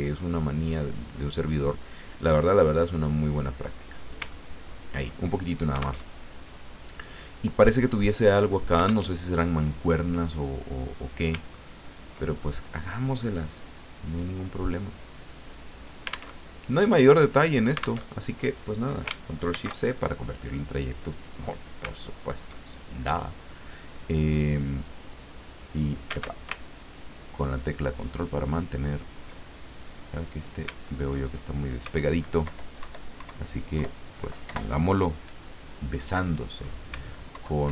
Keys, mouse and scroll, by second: 0.0-1.8 drag, 2.2-4.1 drag, 4.3 ctrl+click, 6.1 alt+Tab, 9.1 alt+Tab, 10.8 click, 11.5-11.8 ctrl+scroll up 2, 13.3-16.1 drag, 16.4 alt+Tab, 18.0 alt+Tab, 19.5 ctrl+shift+c, 21.2 click, 22.0-22.6 ctrl+scroll up 2, 23.1 click, 24.3-26.0 drag, 26.1 ctrl+z, 26.7-28.4 ctrl+drag, 28.8 ctrl+scroll down 2, 30.2 click, 30.8 ctrl+scroll up 2, 31.0 ctrl+click, 32.4 alt+Left, 34.4 alt+Right, 36.2 click, 37.3 alt+Left.